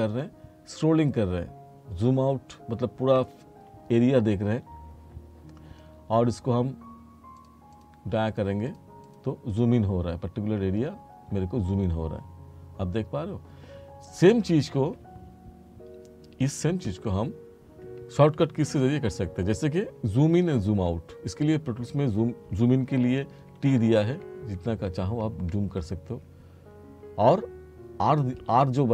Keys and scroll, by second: 23.5 t.